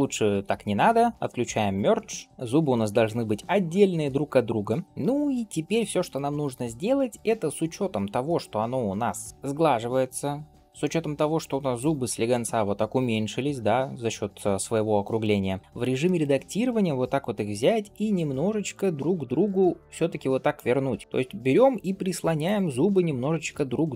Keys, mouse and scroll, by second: 1.6-2.2 drag, 2.2-3.5 shift+middle drag, 2.2 scroll down 3, 3.5-4.5 scroll up 1, 6.2-6.9 scroll up 1, 11.6 click, 15.2 shift+middle click, 15.6 scroll up 1, 15.6 Tab, 15.9 middle click, 17.8 g, 19.4 middle click, 20.0 click, 20.7 middle click, 21.0 g, 22.6 middle click, 23.0 shift+middle click, 23.4-23.8 scroll up 2, 23.8 middle click.